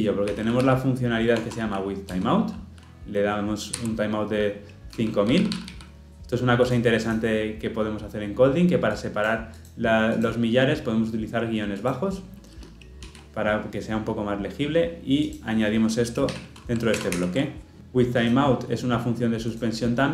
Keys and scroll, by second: 16.9 ctrl+alt+l, 17.1 ctrl+alt+o.